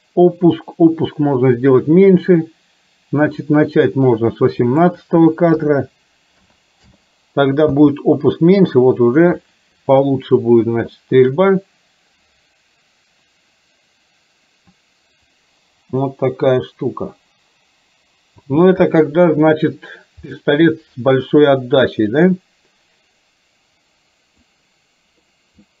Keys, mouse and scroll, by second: 4.9-7.0 drag, 7.8 space, 11.4 click, 18.5 space, 20.5-24.5 middle drag.